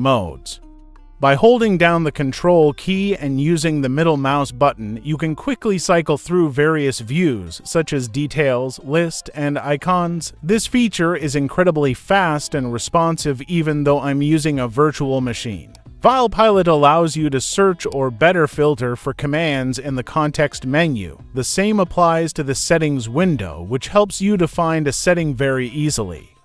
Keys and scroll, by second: 0.2-1.7 ctrl+scroll down 1, 1.7 ctrl+scroll up 1, 3.4 ctrl+scroll up 1, 4.2 ctrl+scroll down 1, 6.1 ctrl+scroll up 1, 9.8-10.3 ctrl+scroll down 2, 11.4-12.1 ctrl+scroll down 1, 12.1 ctrl+scroll up 1, 13.0 ctrl+scroll down 1.